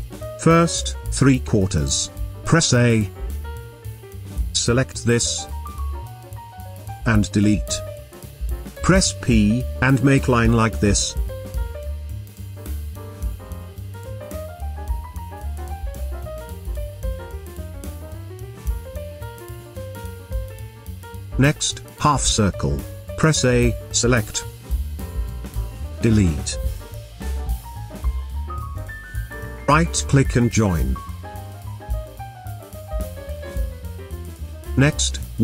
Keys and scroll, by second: 2.8 a, 7.1 Delete, 9.2 p, 17.1 v, 18.9 space, 23.1 a, 26.6 Delete, 33.0 space.